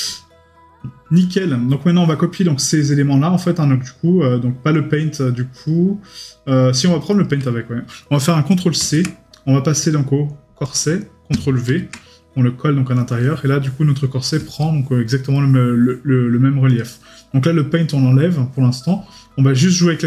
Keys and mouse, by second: 14.6 right click, 15.3 middle click.